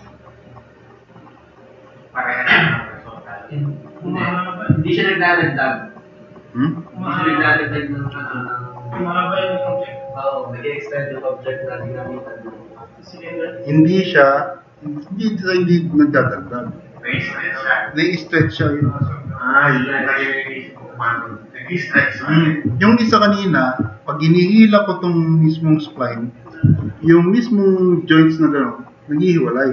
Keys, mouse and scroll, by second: 1.1 drag, 1.9-2.6 drag, 3.2-6.7 drag, 7.6 click, 9.8-11.0 drag, 11.6-12.0 drag, 12.4-12.9 drag, 15.8 click, 16.5-17.1 drag, 17.6-24.0 drag, 24.5 click.